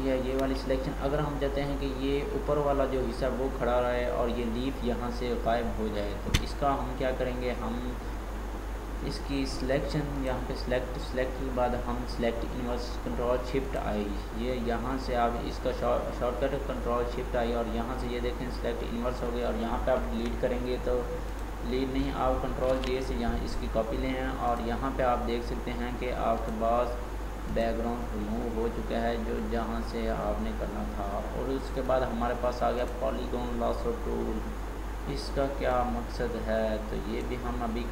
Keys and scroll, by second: 22.7 ctrl+j.